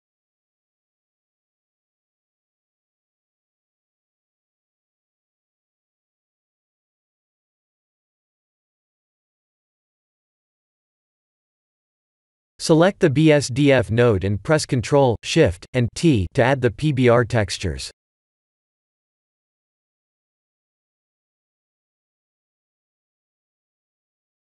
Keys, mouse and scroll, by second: 0.6 scroll down 4, 1.0 middle click, 2.0-3.0 scroll up 6, 2.6 middle click, 7.1 shift+middle click, 9.7-10.1 scroll down 2, 11.1 click, 12.1 click, 14.2 click, 14.7 click, 16.0 ctrl+shift+t, 21.7 middle click, 22.3 middle click, 23.2-23.6 scroll up 4, 23.6 shift+middle click, 24.3-24.5 scroll up 2.